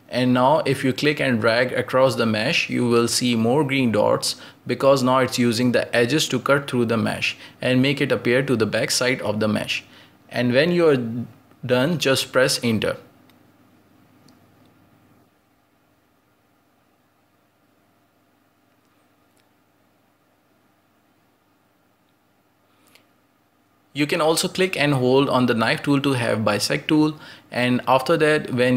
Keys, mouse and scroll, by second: 7.9-10.6 middle drag, 10.6 ctrl+z, 12.7 click, 13.4-14.1 scroll down 1, 14.1-14.5 scroll down 1, 14.5-16.6 scroll up 2, 23.9-26.9 drag.